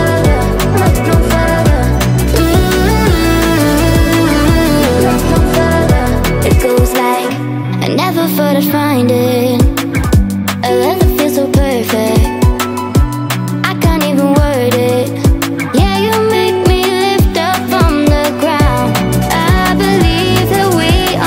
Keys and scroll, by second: 18.5 Right.